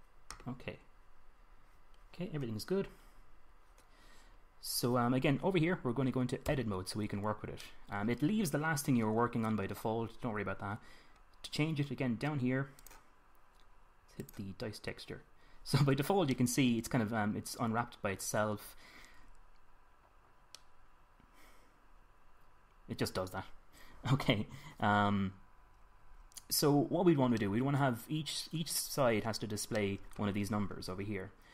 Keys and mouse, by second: 1.4 drag, 7.1 Tab, 17.3-18.7 middle drag, 21.2-23.2 middle drag, 28.2 middle click, 28.5 middle click.